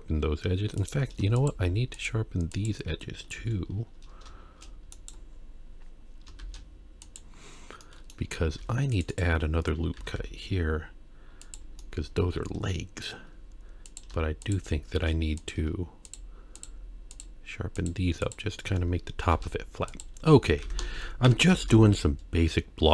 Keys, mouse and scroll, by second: 0.8 click, 1.4 shift+click, 2.0 shift+click, 2.5 shift+click, 3.4 shift+r, 5.0-6.3 right drag, 6.4 shift+e, 7.8 middle click, 8.6 ctrl+r, 10.0 s, 11.8-13.1 middle drag, 13.9 click, 14.4 shift+click, 15.4 click, 16.1 shift+click, 16.6 shift+click, 17.1 shift+click, 17.8 shift+click, 18.2 shift+click, 19.3 shift+e, 20.4 scroll down 1, 20.6 Tab, 21.2 KP_1, 21.6 shift+a.